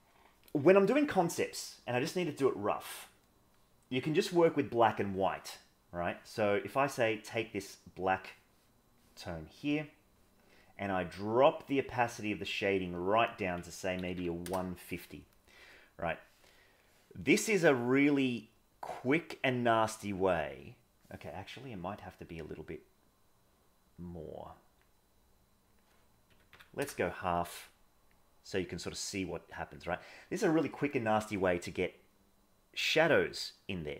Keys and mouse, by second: 11.2-12.6 drag, 13.0-14.4 drag, 16.8 middle click, 19.5 click, 21.9-24.8 drag, 25.7-26.8 drag, 28.1-29.7 drag, 32.1 click.